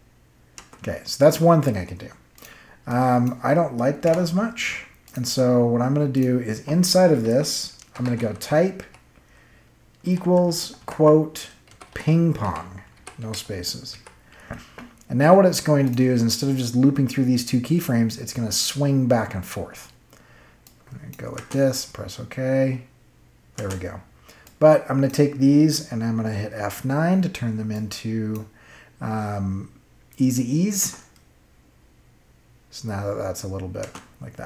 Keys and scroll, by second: 0.5 space, 4.0 BackSpace, 7.6-8.8 typing, 10.0-13.9 typing, 21.3 space, 23.5 space, 26.5 F9, 30.7 space, 33.7 space.